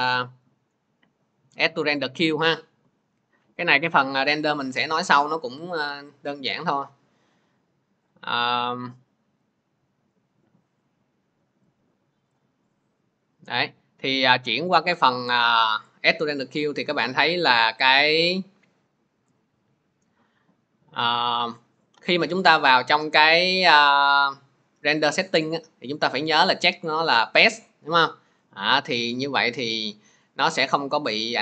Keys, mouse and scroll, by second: 0.3 click, 1.8 click, 9.3 click, 12.2 click, 15.8 click, 17.8 click, 23.0 click.